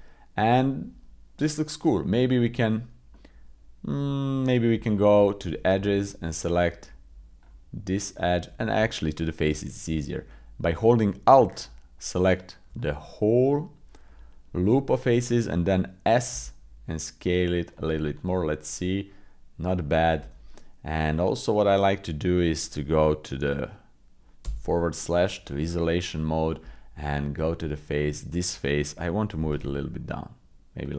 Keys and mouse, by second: 0.6 middle click, 1.4 middle click, 3.1 middle click, 4.7 Tab, 8.8 Tab, 11.5 alt+click, 12.8-14.4 drag, 16.3 s, 18.2-19.4 drag, 20.2 Tab, 20.5 click, 24.5 /, 25.0 click, 26.6 Tab, 29.3 g.